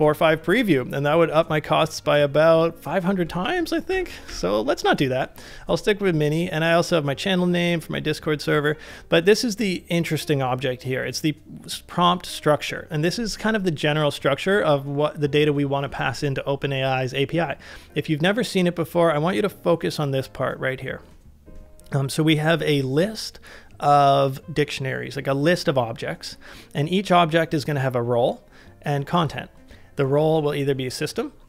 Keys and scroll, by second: 3.4 ctrl+c, 4.3 ctrl+c.